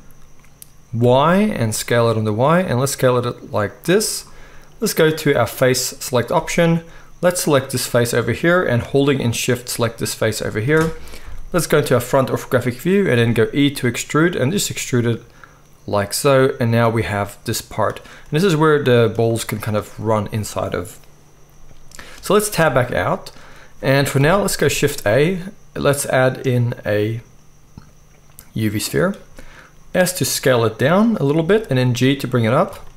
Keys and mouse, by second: 3.7-5.1 middle drag, 5.1-7.5 drag, 7.5-9.5 middle drag, 9.5 shift+click, 9.6-14.2 shift+middle drag, 11.2 KP_1, 13.1 e, 16.3 middle click, 22.5 Tab, 22.5-23.4 middle drag, 24.2 KP_1, 24.7 shift+a, 27.8-32.9 middle drag, 29.8 s, 31.4 g.